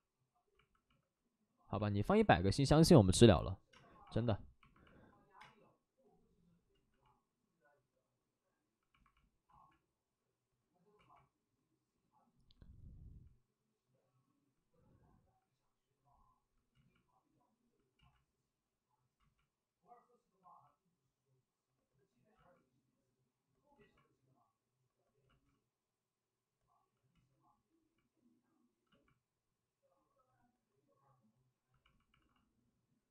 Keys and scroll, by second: 0.8 ctrl+z, 0.9 alt+s, 3.7 alt+s, 3.7 space, 5.3 space, 6.7 ctrl+z, 9.5 ctrl+z, 10.9 ctrl+z, 16.7 ctrl+z, 17.9 ctrl+z, 19.2 ctrl+z, 22.3 ctrl+z, 23.7 ctrl+z, 25.2 ctrl+z, 27.1 ctrl+z, 28.8 ctrl+z, 32.1 alt+s.